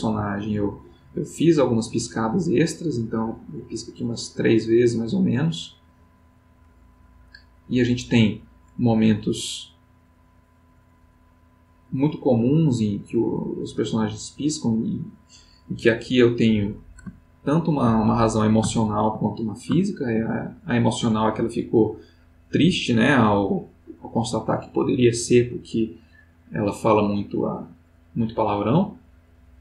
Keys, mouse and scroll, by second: 17.3-18.5 ctrl+middle drag, 18.8 ctrl+middle click, 19.8 ctrl+middle click, 21.8-29.6 drag.